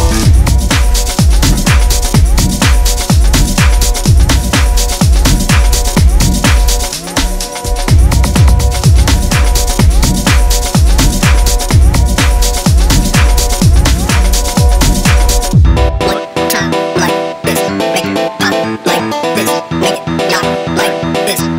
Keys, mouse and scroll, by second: 0.0 click, 0.6-1.7 drag, 2.2 scroll up 1, 2.4 click, 2.9 click, 3.6 click, 4.0 click, 5.9 e, 6.4 scroll up 2, 6.9 click, 7.3 e, 9.2 e, 10.3 e, 12.6 scroll up 1, 12.8 e, 13.4 scroll down 1, 13.5 e, 14.6 click, 15.1 ctrl+r, 16.0 ctrl+r, 17.0 click, 18.3 ctrl+r, 19.8 click, 20.2 scroll down 2, 20.3 click, 20.5 click, 20.8 scroll down 2, 20.8 click, 21.0 scroll up 1, 21.1 click.